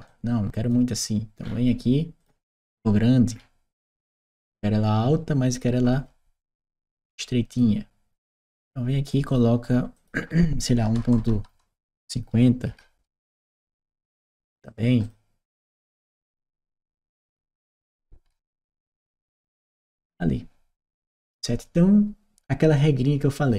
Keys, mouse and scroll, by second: 7.3 click, 8.3 click, 9.1 click, 9.8 click, 10.7 BackSpace, 13.0 Return, 14.3 click, 14.8 click, 15.6 click, 16.8 f, 17.2 d, 17.4 Return, 18.5-19.7 right drag, 18.7 d, 21.1 click, 22.6 click.